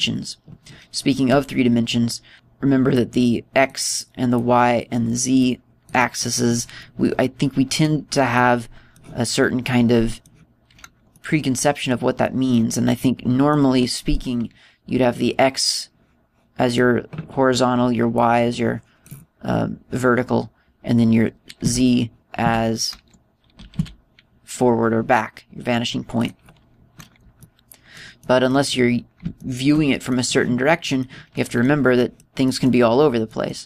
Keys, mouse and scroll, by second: 3.1 middle click, 4.0 click, 5.4 click, 6.5 click, 8.3 middle click, 9.4 middle click, 10.7 middle click, 12.2 middle click, 13.3 middle click, 16.3 click, 19.2 click, 22.7 z, 23.5 z, 24.6 g, 27.3 click, 28.5 middle click, 29.3 middle click, 30.4 shift+middle click, 31.2 middle click, 31.9 middle click, 32.6 middle click, 32.6-33.0 scroll down 1, 33.0 middle click.